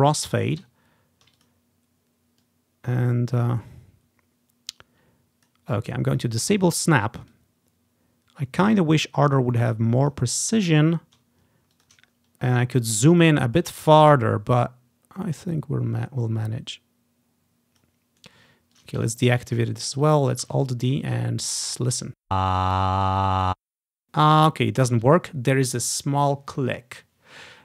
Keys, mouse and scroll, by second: 1.1 ctrl+shift+scroll up 2, 1.5-5.6 drag, 6.3 click, 7.4-11.3 drag, 8.6 typing, 10.6-11.9 ctrl+scroll down 1, 11.9 ctrl+click, 12.2-13.0 ctrl+scroll up 1, 13.0 typing, 13.3 click, 13.7-18.4 drag, 18.3 right click, 18.9 click, 19.2 scroll down 1, 19.5 ctrl+click, 19.6 middle click, 19.7 ctrl+click, 20.2 click, 20.2 middle click, 20.3-23.1 ctrl+alt+drag, 20.6 alt+d, 22.2 space, 23.5 space.